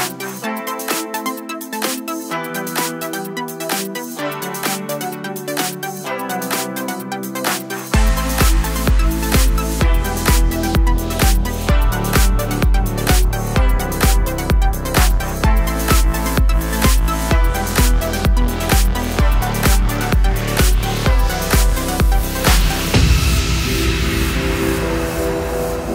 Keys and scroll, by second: 16.5 alt+shift+/.